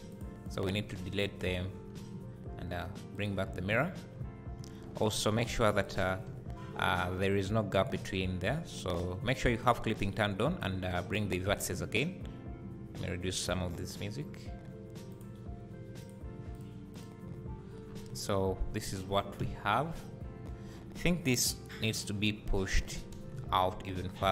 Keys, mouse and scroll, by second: 0.1 click, 0.5 click, 1.5 x, 1.8 Tab, 3.2-6.0 drag, 3.9-4.2 scroll down 2, 5.0 Tab, 5.4 1, 7.3-15.2 drag, 11.6 Tab, 16.0 click, 16.5 click, 17.5 scroll down 1, 18.1 `, 19.0 scroll down 1, 19.4 `, 20.1-20.6 scroll up 1, 20.7 Tab, 21.7 3, 22.0 click, 23.4 KP_Decimal, 24.1 scroll down 2.